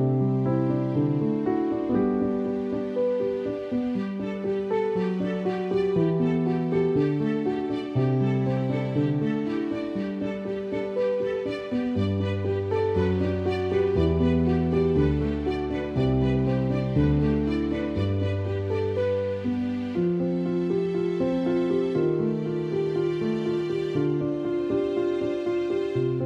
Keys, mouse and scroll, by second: 2.0 ctrl+alt+click, 7.6 click, 9.2 click, 11.9 click, 16.2 click, 16.6 space, 17.7 click, 22.2 ctrl+-, 24.3 click.